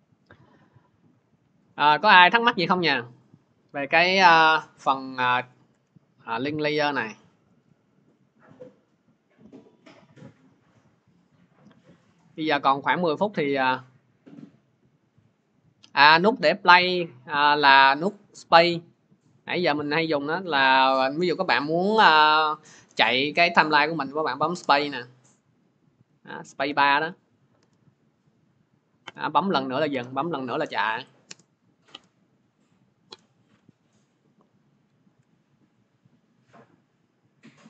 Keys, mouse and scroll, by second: 3.8 alt+Tab, 5.6 alt+Tab, 9.7 click, 12.0 click, 18.1-24.7 drag, 34.1 click, 34.9 alt+Tab.